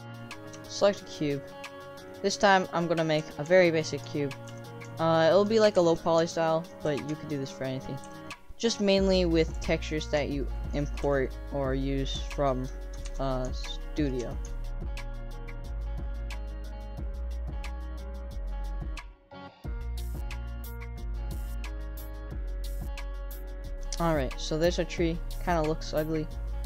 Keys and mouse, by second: 0.8 shift+middle click, 2.1-2.8 middle drag, 3.2 s, 4.5 g, 5.7 shift+d, 6.8 s, 8.5 g, 9.5 s, 11.0 g, 12.2 shift+click, 13.0 shift+d, 14.2 s, 15.1 g, 16.3 middle click, 16.7 click, 16.9 shift+a, 17.6 s, 18.2 middle click, 18.3 Tab, 18.3 3, 18.9 g, 19.8 click, 20.2-22.7 typing, 24.0 click, 24.7 middle click.